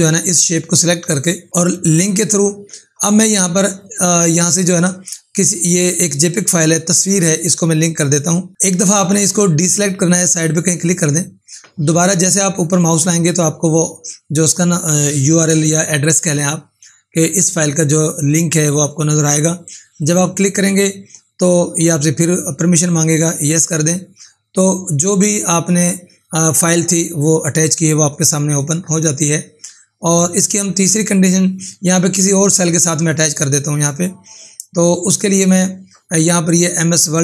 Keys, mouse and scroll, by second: 1.6 click, 3.6-5.1 scroll down 1, 5.8 click, 10.8 click, 19.9 click, 23.2 click, 30.0 click, 35.3 click.